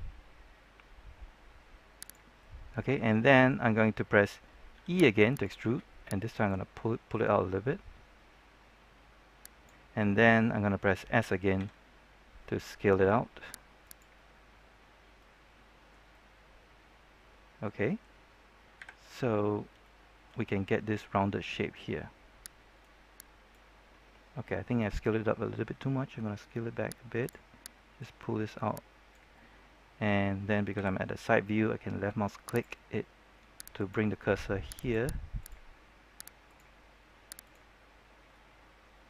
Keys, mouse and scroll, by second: 1.9 click, 2.3-3.8 middle drag, 4.7 e, 5.2 right click, 6.4-9.9 drag, 11.5 s, 13.8 click, 15.1 middle click, 18.7 KP_3, 19.3 scroll up 1, 19.8 shift+middle click, 22.7-24.1 drag, 25.5 s, 27.1-29.2 drag, 30.7 KP_3, 32.4 click, 37.9-39.0 scroll up 1.